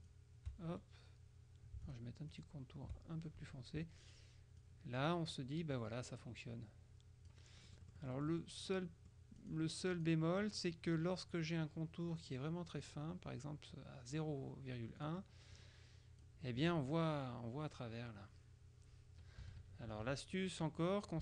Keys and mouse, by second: 0.1 shift+click, 0.8 shift+right click, 2.0 shift+click, 4.7-5.7 drag, 5.8-9.0 drag, 9.5 click, 12.2 right click, 12.9 click, 15.1-16.8 drag, 19.5 KP_Subtract.